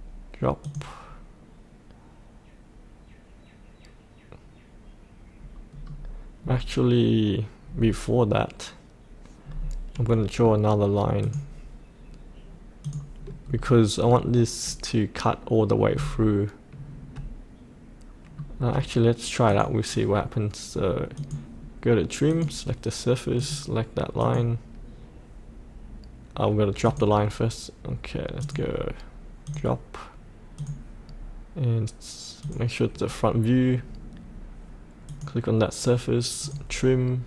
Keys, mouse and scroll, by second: 5.8-6.3 scroll up 1, 6.3-7.7 scroll down 1, 7.7-11.2 scroll up 1, 11.2 click, 13.4-19.4 scroll down 1, 19.4-37.2 drag.